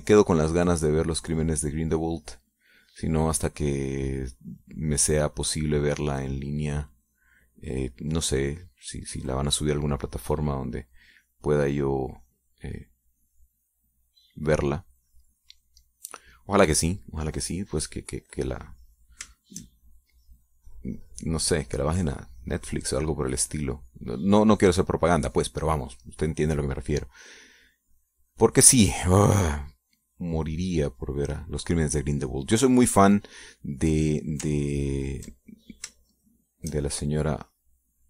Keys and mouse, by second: 0.3-4.2 drag, 4.6-7.3 drag, 7.3-10.1 drag, 10.4 middle click, 11.6-16.2 drag, 16.5 click, 17.3 click, 18.1 middle click, 18.1 click, 20.5 shift+click, 20.9-27.1 shift+drag, 28.3-32.6 drag, 32.6 middle click, 32.7 click, 33.4 click, 34.6 click, 36.2 ctrl+click, 37.1 shift+click.